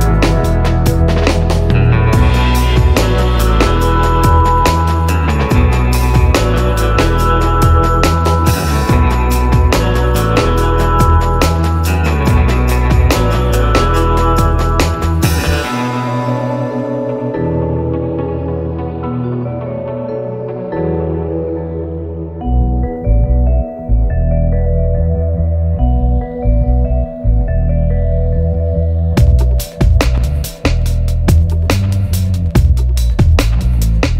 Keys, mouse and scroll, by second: 4.6 click, 14.5 click, 14.6 middle click, 17.5 scroll down 1, 23.8-29.3 drag, 29.5-33.9 drag.